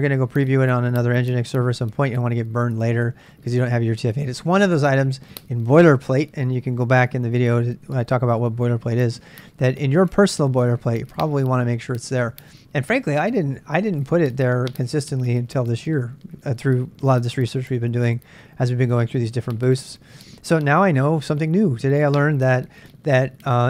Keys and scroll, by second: 3.9 l.